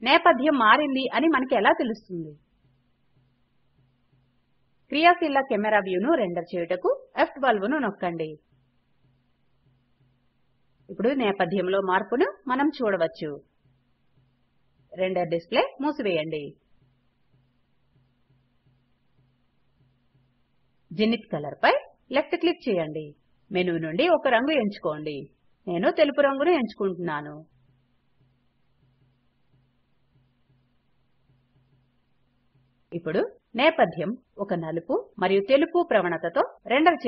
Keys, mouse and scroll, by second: 2.8 F12, 18.3 click.